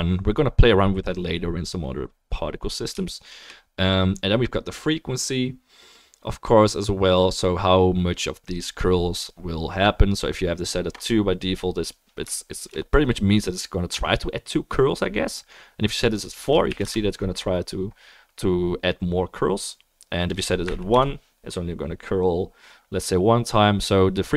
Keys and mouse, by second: 12.7-24.3 shift+middle drag, 12.7-24.3 shift+right drag.